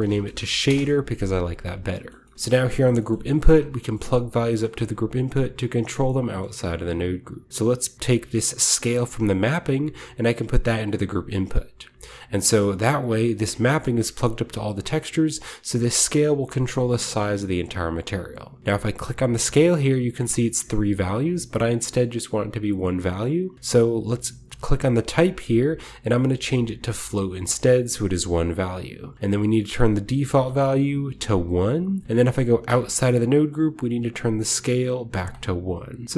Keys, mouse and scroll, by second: 0.0-0.5 typing, 0.2 click, 0.6 Return, 1.3-2.3 scroll down 1, 2.0 middle click, 2.3 middle click, 2.3-4.4 scroll up 1, 2.3 a, 2.7-5.2 drag, 3.2 g, 4.4-4.9 shift+scroll up 1, 5.9-7.5 shift+drag, 6.2-8.1 scroll up 1, 9.5-13.6 drag, 13.6-15.1 middle drag, 13.6-14.8 scroll down 1, 14.8-17.2 scroll up 1, 19.0-20.5 drag, 24.9-26.5 drag, 27.0-28.1 drag, 28.1-30.0 scroll down 1, 30.0 click, 31.0 1, 31.4 click, 31.9 middle click, 32.5-33.1 drag, 32.6 Tab, 33.2-34.4 scroll up 1, 34.4-36.1 drag, 34.4-35.2 scroll up 1, 34.7 1.